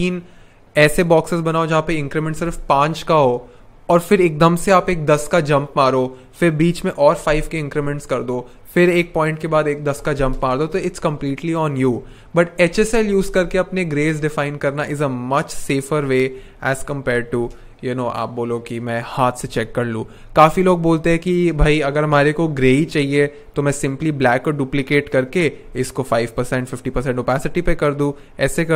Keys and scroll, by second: 15.3 n, 15.8 shift+n, 25.3 shift+5, 28.1 shift+2.